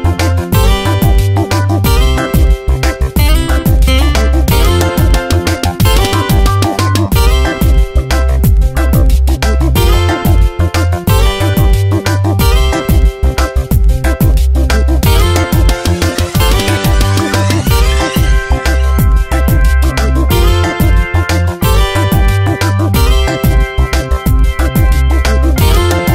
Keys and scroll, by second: 3.7 ctrl+t, 9.9 Return, 10.4 Tab, 13.9 ctrl+z, 18.0 Tab, 25.4 x.